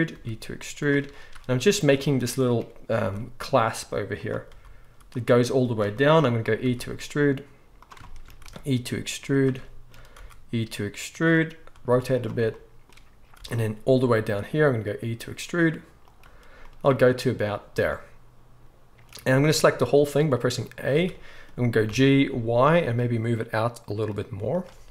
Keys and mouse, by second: 0.1 e, 3.0 e, 4.4 r, 6.6 e, 8.4 e, 10.1 e, 11.7 r, 14.7 e, 20.9 a, 21.8 g.